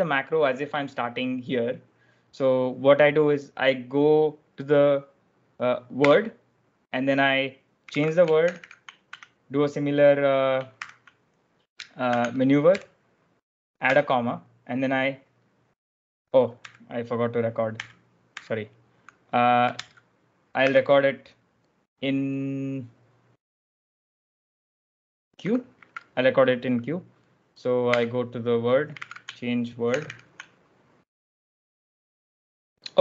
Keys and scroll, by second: 5.9 w, 7.7-9.0 typing, 10.7 shift+p, 12.0-13.1 typing, 13.8 Escape, 16.5 u, 17.7 u, 18.2 u, 19.7-21.0 typing, 25.7 q, 27.7 w, 28.8 c, 29.9 shift+', 31.8 shift+'.